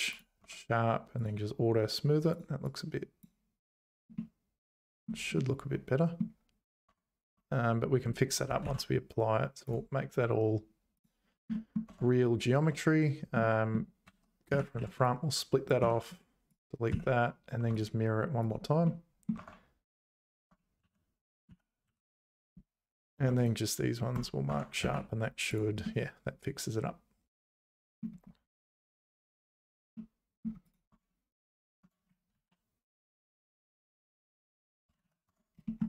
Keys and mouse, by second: 0.4 Tab, 1.1 click, 2.3 click, 2.7 click, 4.1 middle click, 5.3 middle click, 6.8 Tab, 7.4 Tab, 8.6 ctrl+a, 11.5 middle click, 11.8 Tab, 13.4 middle click, 14.1 `, 14.5 z, 14.8 1, 15.1 click, 15.8 x, 16.9 z, 17.8 click, 18.8 middle click, 19.4 Tab, 20.3 Tab, 20.8 3, 21.5 z, 21.9 2, 23.1 shift+click, 23.4 right click, 24.5 Tab, 24.8 z, 25.5 click, 25.8-28.0 middle drag, 29.9 middle click, 30.6 click, 30.9 Tab, 31.8 Tab, 32.3 alt+h, 33.6 click, 35.0 ctrl+z, 35.3 Tab, 35.6 shift+middle click.